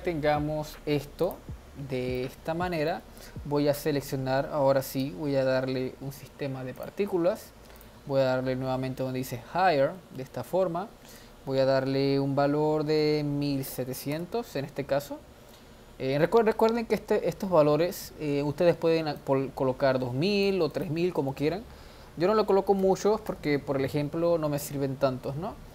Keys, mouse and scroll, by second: 1.3 click, 2.1-4.9 middle drag, 4.9 click, 6.7-7.9 drag, 10.4 ctrl+s, 11.2-13.8 drag, 13.8 0, 15.5-16.0 scroll down 1, 16.0 scroll up 1, 19.2-23.0 drag, 23.0 0.